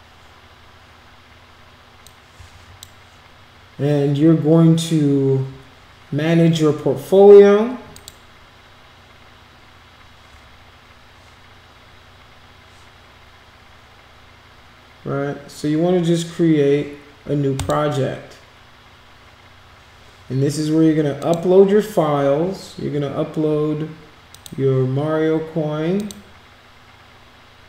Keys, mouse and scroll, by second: 2.0 click, 7.9 click, 17.5 click, 21.1 click, 24.3 click, 25.9 click.